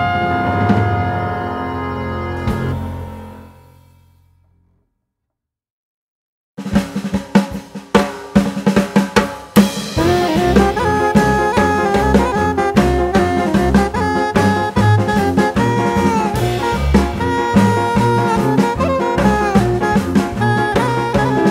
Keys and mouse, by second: 2.4 click, 4.4 click, 6.7 click.